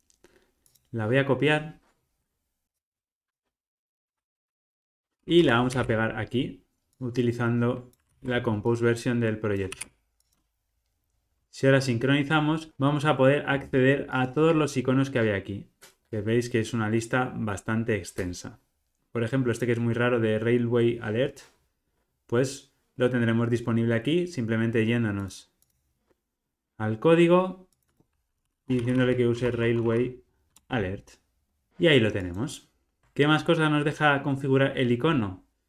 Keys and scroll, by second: 4.1 super+d, 4.4 super+z, 4.6 super+x, 5.7 super+v, 8.0 super+c, 10.6 super+v, 30.5 Return, 33.0 super+b.